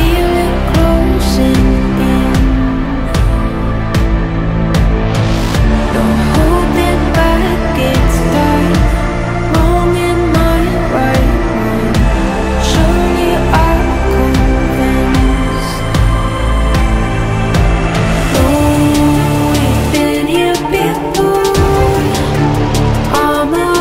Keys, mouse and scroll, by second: 0.0-0.1 typing, 1.5 ctrl+t, 2.8 ctrl+t, 4.8 shift+click, 5.2 ctrl+g, 5.3 right click, 6.0 ctrl+j, 6.2 ctrl+t, 8.1 shift+click, 8.3 ctrl+j, 8.4 right click, 8.8 right click, 9.0 ctrl+g, 9.1 right click, 9.7 ctrl+j, 9.9 ctrl+t, 11.4 ctrl+click, 11.6 ctrl+g, 11.8 ctrl+j, 12.1 ctrl+z, 12.2 right click, 13.0 ctrl+t, 15.4 ctrl+z, 15.9 ctrl+t, 22.7 Delete, 23.7 alt+scroll down 1.